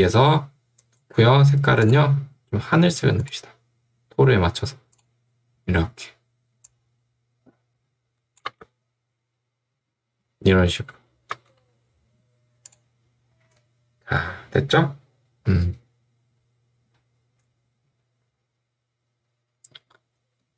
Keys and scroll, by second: 8.6 space, 11.4 space.